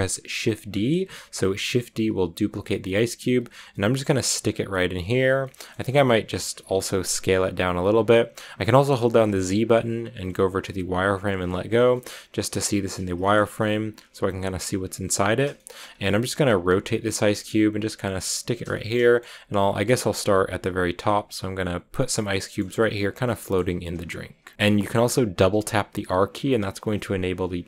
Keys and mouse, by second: 0.8 shift+d, 4.4 g, 5.0 click, 5.5 middle click, 6.2 middle click, 6.9 s, 7.7 click, 9.1 z, 12.7 middle click, 13.8 r, 15.2 click, 16.0-18.1 typing, 16.2 click, 16.9 click, 17.1 click, 17.6 click, 18.0 click, 18.3 drag, 18.8-19.1 drag, 19.2-21.5 typing, 19.5 click, 20.0 click, 20.4 click, 21.1 click, 21.8 click, 22.4 click, 22.5 g, 22.8 click, 23.4 drag, 25.4 r, 25.5 r.